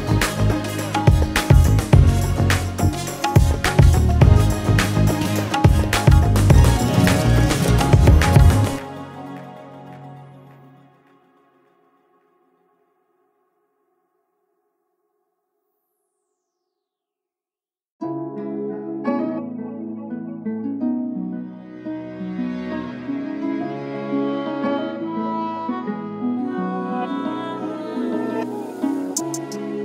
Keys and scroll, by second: 0.9 ctrl+space.